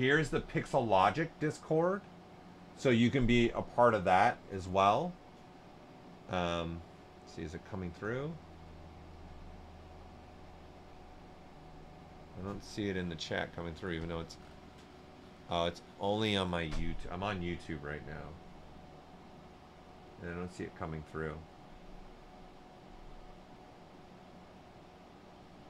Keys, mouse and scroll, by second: 14.3-14.8 scroll up 1.